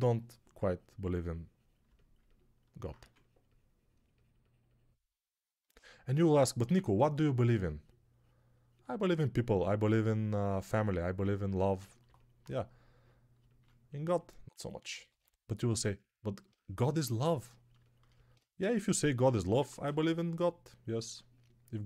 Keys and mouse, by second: 2.8 2, 6.5 1, 14.9 2, 19.4 1.